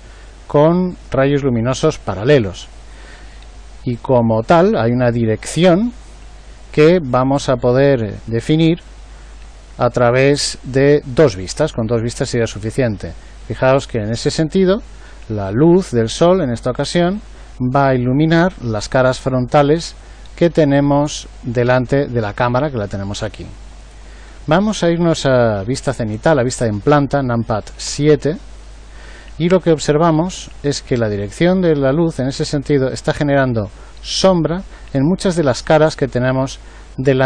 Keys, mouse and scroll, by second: 22.6-25.7 right drag, 27.8 KP_7.